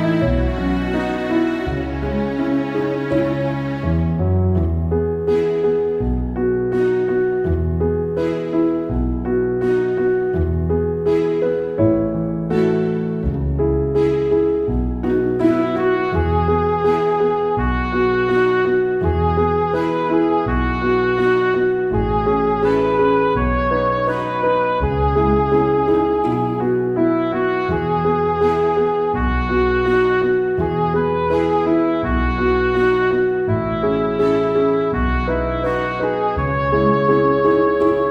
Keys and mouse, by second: 6.0 ctrl+z, 7.8 ctrl+z, 8.0 ctrl+z, 8.1 ctrl+z, 8.3 ctrl+z, 8.4 ctrl+z, 8.6 right click, 8.8 ctrl+z, 9.0 ctrl+z, 9.0 right click, 9.2 ctrl+z, 9.4 ctrl+z, 10.5 ctrl+z, 10.6 ctrl+z, 11.8 ctrl+z, 12.2 ctrl+z, 12.7 ctrl+z, 13.3 ctrl+z, 13.7 ctrl+z, 13.9 ctrl+z, 15.3 ctrl+z, 15.6 ctrl+z, 15.8 ctrl+z, 16.8 ctrl+z, 17.0 ctrl+z, 17.4 ctrl+z, 20.0 ctrl+z, 20.1 ctrl+z, 20.2 ctrl+z, 20.4 ctrl+z, 20.8 ctrl+z, 21.4 ctrl+z, 21.9 right click, 22.2 ctrl+z, 22.4 ctrl+z, 22.6 ctrl+z, 23.0 ctrl+z, 23.3 ctrl+z, 23.4 ctrl+z, 24.0 ctrl+z, 24.3 ctrl+z, 25.9 ctrl+z, 26.9 ctrl+z, 27.0 ctrl+z, 29.2 ctrl+z, 29.4 ctrl+z, 29.9 ctrl+z, 30.5 ctrl+z, 30.9 ctrl+z, 31.4 ctrl+z, 33.6 ctrl+z, 33.8 ctrl+z, 33.9 ctrl+z, 34.3 right click, 34.5 ctrl+z, 35.1 ctrl+z, 35.4 ctrl+z, 35.7 ctrl+z, 36.0 ctrl+z, 37.9 right click.